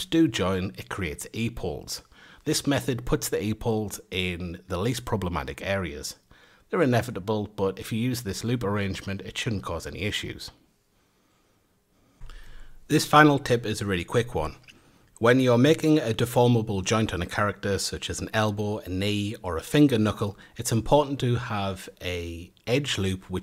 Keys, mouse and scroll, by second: 0.0-1.3 drag, 1.9 click, 2.6-4.1 middle drag, 4.3 click, 5.2 click, 5.4 middle click, 5.7 a, 5.9 middle click, 6.1-6.5 scroll down 1, 6.5-7.0 middle drag, 7.0-7.3 scroll down 1, 7.3-9.1 shift+middle drag, 10.8 click, 11.4 click, 11.7 a, 12.2 F8, 13.6 Tab, 14.9 3, 16.6 alt+shift+click, 18.7 alt+shift+click, 19.8-21.2 drag, 21.2 a, 22.4 alt+shift+click.